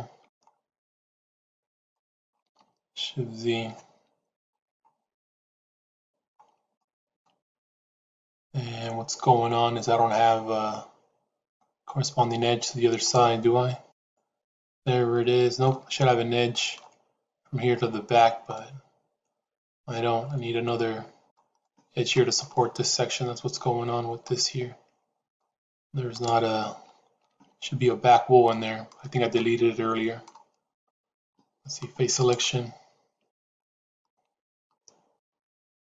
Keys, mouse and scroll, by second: 1.8 middle click, 3.4 shift+z, 6.7 shift+middle click, 7.4-11.4 middle drag, 13.0 click, 13.8 click, 14.7 middle click, 16.0 middle click, 18.5-21.2 middle drag, 21.5 middle click, 22.5-25.3 middle drag, 26.0 click, 28.7 middle click, 28.7 shift+z, 29.2 middle click, 30.6 click, 32.0 click, 33.1 click, 34.0-35.0 middle drag, 35.5-35.8 middle drag.